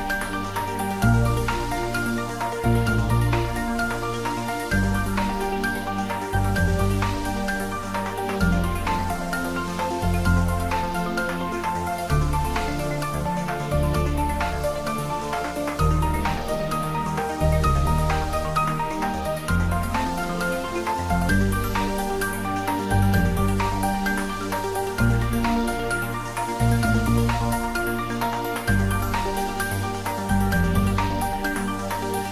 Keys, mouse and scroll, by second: 0.4 middle click, 1.1 ctrl+z, 2.0 ctrl+z, 4.2 2, 4.7 click, 5.5 alt+click, 8.5 ctrl+b, 11.8-13.3 scroll up 1, 14.8 click, 15.4 Tab, 15.8-17.8 middle drag, 17.8 Tab, 18.4 click, 19.7 3, 20.2 click, 20.6-23.5 middle drag, 23.5 ctrl+r, 27.2 click, 29.1 middle click, 29.8 click, 31.1 3, 31.3 click, 31.9 shift+click.